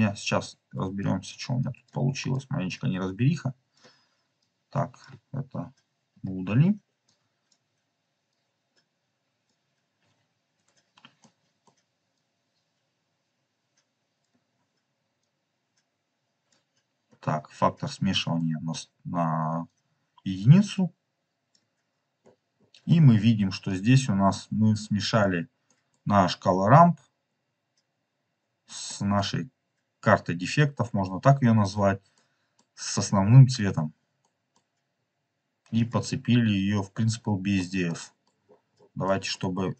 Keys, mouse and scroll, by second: 1.0 click, 1.5 click, 2.3 click, 2.9 click, 3.1 click, 4.3-5.0 drag, 6.1 Delete, 6.3-6.7 scroll up 3, 7.0 click, 8.2 click, 10.2 scroll down 3, 11.1 middle click, 13.2 click, 14.4 scroll up 2, 15.1-16.5 drag, 17.2 scroll up 2, 18.2-19.0 scroll up 4, 18.4 middle click, 19.6-21.4 drag, 22.1-22.8 scroll down 5, 23.6-25.2 drag, 25.6 middle click, 28.7 click, 28.8 middle click, 32.0 middle click, 32.4 middle click, 34.1 middle click, 34.9 scroll up 3, 35.7 click, 37.4 scroll down 2, 37.9 middle click, 38.3-38.9 scroll down 3, 39.0 middle click.